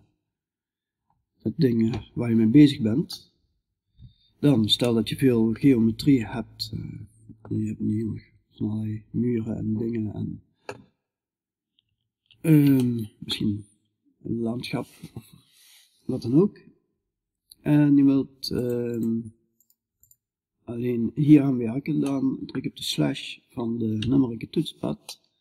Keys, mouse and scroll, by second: 0.5 middle click, 3.0-6.6 middle drag, 12.2-18.4 middle drag, 18.4-21.5 drag, 21.5-23.4 middle drag, 23.4 KP_Divide, 24.6-25.4 middle drag.